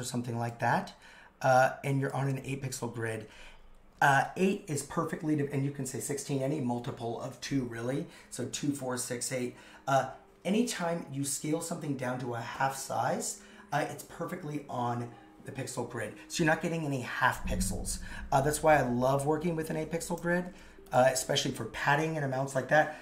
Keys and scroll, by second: 20.5 super+x.